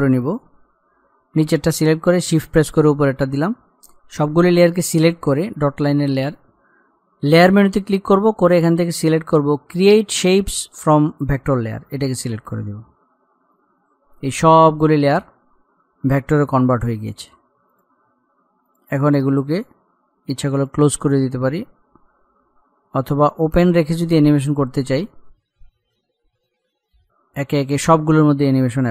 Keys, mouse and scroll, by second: 0.2 shift+click, 2.8-3.6 scroll up 1, 11.5 click, 15.0-16.0 scroll down 1, 18.0 click, 23.2-23.8 scroll down 1, 25.9 click, 26.8-27.2 scroll up 1, 27.2 click, 28.2-28.9 scroll up 1.